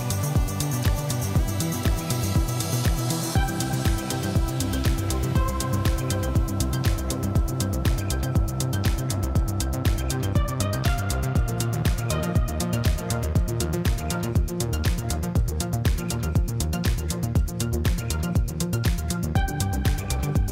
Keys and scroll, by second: 1.0 Tab, 1.9 1, 2.3 shift+z, 4.7 shift+z, 5.8 g, 6.0 z, 11.2 Tab, 13.0 Tab, 13.8 alt+a, 15.6 ctrl+r.